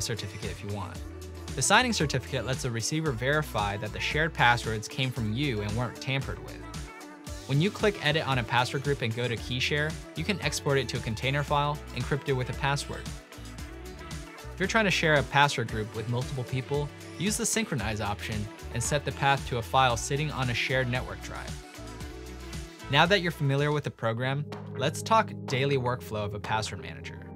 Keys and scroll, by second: 2.9-4.9 typing, 12.4-14.1 typing, 19.6 typing, 22.0-22.8 typing, 27.1 ctrl+n.